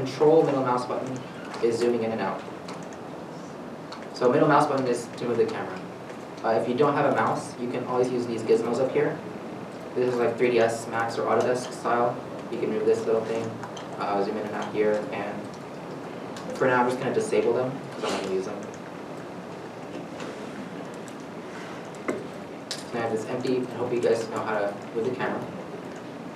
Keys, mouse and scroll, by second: 1.2 ctrl+middle click, 19.9 middle click, 21.4 scroll up 1, 23.1 middle click.